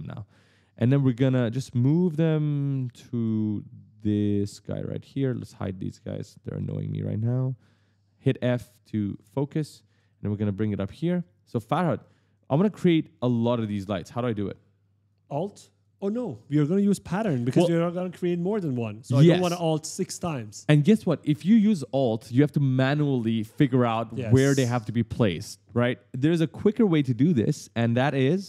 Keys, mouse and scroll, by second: 0.1 right click, 0.2 e, 1.6-3.3 typing, 4.1 click, 5.3 click, 6.3 click, 7.0 click, 8.0-9.5 typing, 10.8 click, 11.8 right click, 11.9 s, 12.1 d, 16.7 scroll up 1, 26.9-28.4 typing, 27.1 right click.